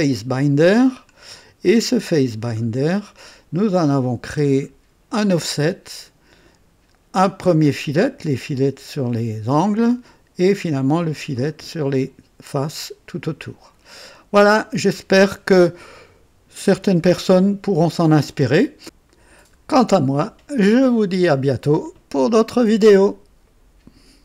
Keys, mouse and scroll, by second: 0.6 click, 1.0 scroll down 2, 2.1 click, 2.5-2.9 scroll down 2, 3.9 click, 4.4 scroll down 2, 11.3 click, 14.0-14.9 drag, 17.6-19.0 drag, 23.4 right click, 23.4 click.